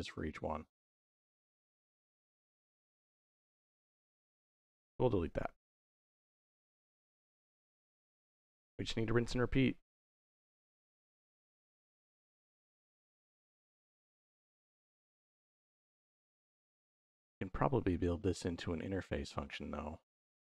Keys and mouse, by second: 2.6 middle click, 3.7 click, 4.3 x, 4.8 middle click, 6.8-7.2 drag, 8.4-9.1 drag, 9.8 middle click, 11.0 g, 13.0 click, 13.4 middle click, 15.2-16.6 drag, 17.0 click, 18.7 middle click, 20.1-20.5 drag.